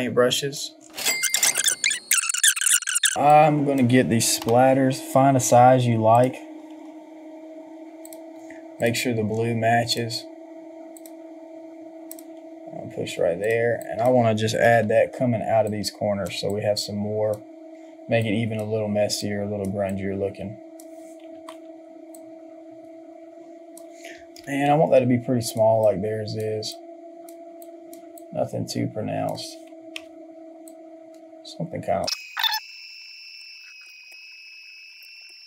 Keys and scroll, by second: 14.6 ctrl+t, 21.3 Return, 29.9 Return, 32.1 ctrl+j, 33.3 Return, 35.0 Return, 35.2 ctrl+j.